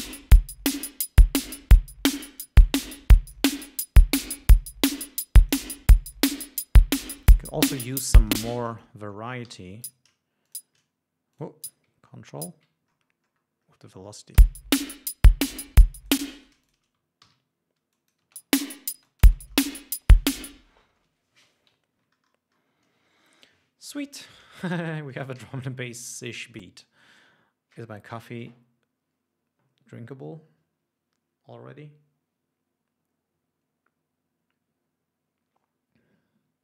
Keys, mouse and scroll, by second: 0.3-2.9 drag, 3.8-6.0 drag, 6.4 click, 7.4 click, 8.7 space, 9.0 click, 9.7 e, 10.1 click, 10.7 shift+click, 11.6 click, 12.7 ctrl+click, 13.1-13.5 ctrl+scroll down 3, 14.7 l, 15.6 g, 16.3 click, 16.5 space, 16.7 shift+right click, 16.9 shift+click, 18.2 click, 18.6 space, 19.2 ctrl+space, 19.4 ctrl+click, 19.8 ctrl+scroll down 1, 21.6 space, 22.2 ctrl+scroll up 2, 23.0 scroll down 2, 25.7 ctrl+s.